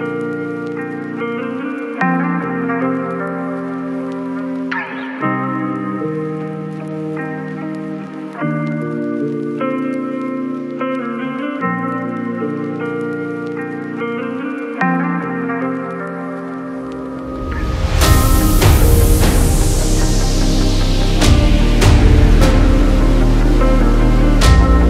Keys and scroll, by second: 2.0 x, 19.4 ctrl+j, 23.4 ctrl+j.